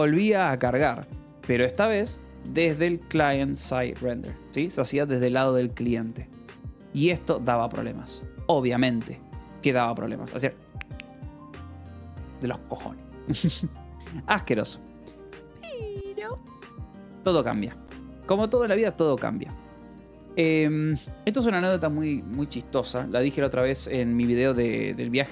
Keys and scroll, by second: 0.0-1.2 typing, 3.3 shift+c, 4.0 s, 4.9 ctrl+s, 6.6 Escape, 15.1 Return, 16.1 Escape, 16.4-18.6 typing, 17.2 Escape, 20.1 space.